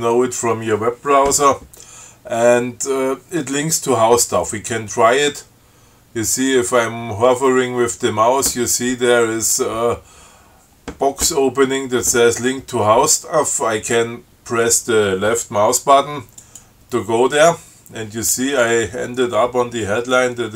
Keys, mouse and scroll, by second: 16.6 click.